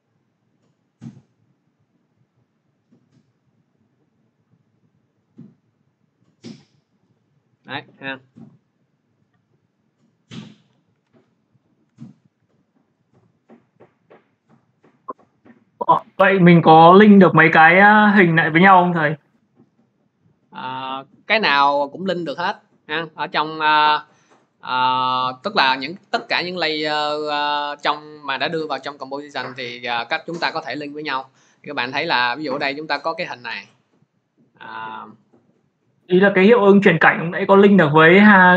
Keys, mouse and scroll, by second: 6.9 click, 8.6 click, 9.2 click, 9.6 click, 10.1 click, 10.8 Delete, 11.5 click, 11.7 Delete, 12.9 click, 14.4 click, 14.5 click, 17.1 click, 19.1 click, 23.2 click, 24.5 click, 29.2 click, 31.9 click.